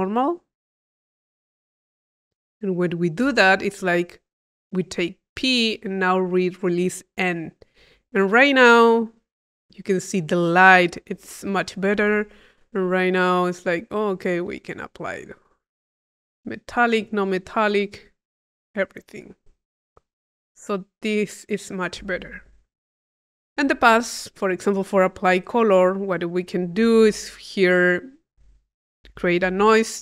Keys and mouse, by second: 0.5 click, 1.4 click, 11.5 click, 13.3-16.4 drag, 16.8-21.9 drag, 22.3-24.0 drag, 24.5 click, 25.2 click, 26.0-27.7 drag, 26.9 Tab, 28.2 click, 29.5 i.